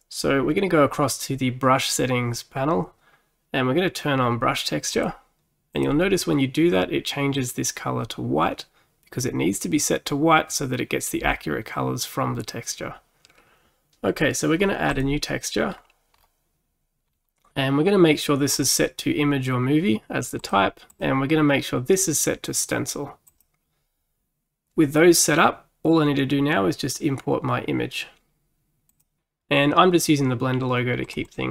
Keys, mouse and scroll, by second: 5.0 click, 5.8-9.0 drag, 15.0-15.8 drag, 15.8-16.5 scroll down 4, 17.1-18.5 scroll down 4, 18.6-20.5 drag, 21.0-24.0 drag, 28.9 click.